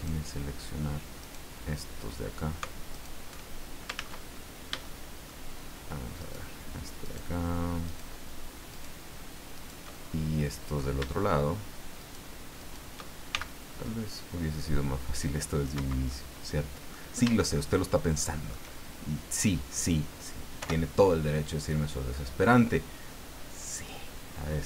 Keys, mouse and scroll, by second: 1.2 shift+right click, 2.9 alt+shift+right click, 3.9 ctrl+z, 4.3 ctrl+scroll up 2, 4.8 shift+middle click, 6.2 shift+right click, 7.0 shift+right click, 7.9 shift+right click, 8.7 shift+right click, 9.6 shift+right click, 9.9 shift+middle click, 12.0 shift+right click, 12.6 shift+right click, 13.3 shift+c, 14.1-15.9 drag, 15.7 Escape, 16.1 middle click, 17.5-18.7 shift+middle drag, 20.6 o, 22.4-24.6 drag.